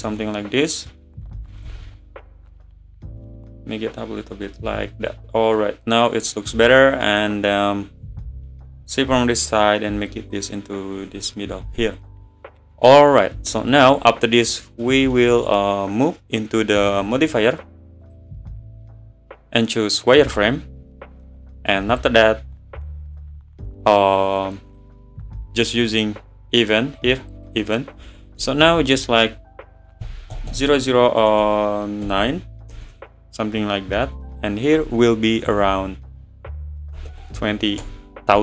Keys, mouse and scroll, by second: 1.5 s, 4.2 click, 4.5-6.1 middle drag, 6.1 click, 6.6-7.1 middle drag, 7.1 `, 9.0 click, 11.2 middle drag, 11.5 scroll up 1, 11.7 scroll down 1, 11.8-13.9 middle drag, 13.9-14.5 scroll up 5, 14.5 scroll down 4, 14.8-16.5 middle drag, 16.5-17.0 scroll up 10, 20.2-20.8 drag, 20.8-21.8 scroll down 2, 21.8-24.7 scroll down 17, 24.7 click, 27.5-28.6 drag, 28.6 BackSpace, 28.7 BackSpace, 30.5 0, 30.6 0, 34.2 click, 34.9 BackSpace, 35.1 BackSpace.